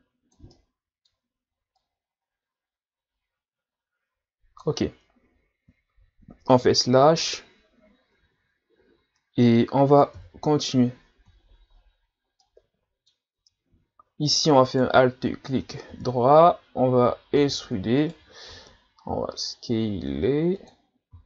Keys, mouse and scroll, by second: 0.5-1.8 middle drag, 1.8 click, 6.6 KP_Divide, 8.2 Tab, 10.1 KP_1, 11.5-12.4 scroll down 1, 12.4-13.4 middle drag, 13.4 Tab, 14.7 alt+right click, 15.9 KP_1, 17.5 e.